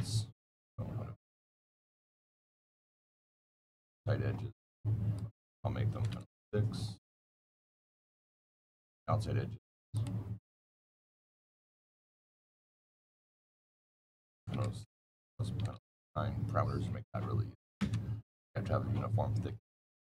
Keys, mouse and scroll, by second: 0.5 click, 1.8 click, 2.7 click, 3.3 click, 5.0 click, 5.8 KP_Decimal, 5.9 KP_0, 6.1 KP_6, 8.6 click, 9.8 click, 10.7 scroll, 10.8-11.5 scroll down 7, 11.5 click, 13.4 click, 14.2-15.9 typing, 15.2 KP_Add, 17.7 KP_Enter, 19.6 middle click, 19.6 scroll.